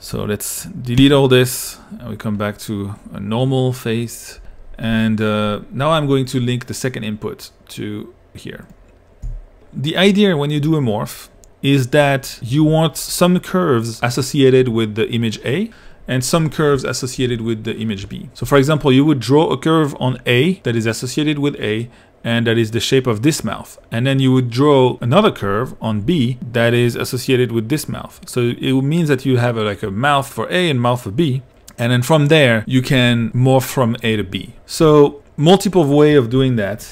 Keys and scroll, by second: 9.3 i, 17.2 2, 18.5 i, 26.1 2, 34.8 i.